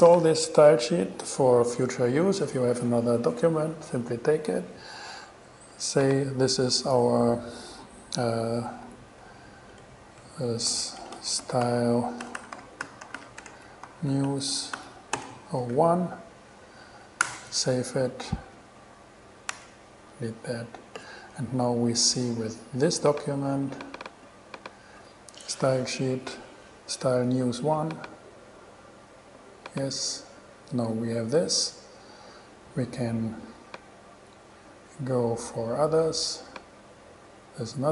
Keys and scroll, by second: 9.1-15.7 typing, 17.4 Return, 19.7 super+w.